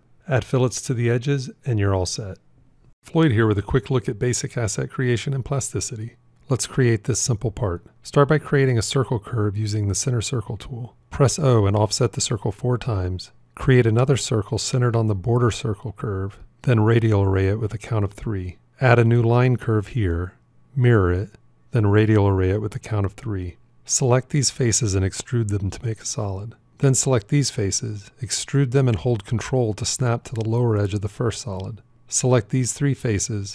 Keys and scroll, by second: 8.2 shift+c, 10.8 o, 13.4 shift+c, 18.6 shift+a, 20.4 alt+x.